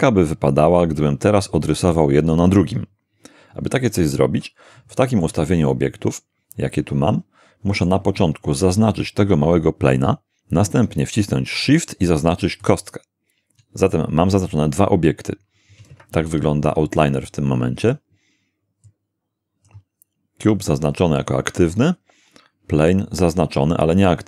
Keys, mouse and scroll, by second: 4.9-8.0 shift+middle drag, 12.6 shift+right click, 15.9 shift+space, 18.9 click.